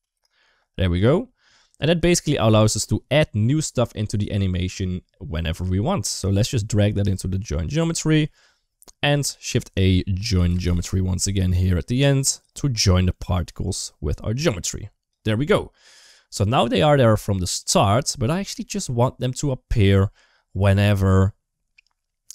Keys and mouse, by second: 1.5 click, 6.0 click, 6.3 click, 7.8 middle click, 8.5 click, 9.1 shift+a, 11.7 click, 12.4 g, 13.5 click, 14.2 click, 15.4 middle click, 18.5 middle click, 19.2-20.6 drag.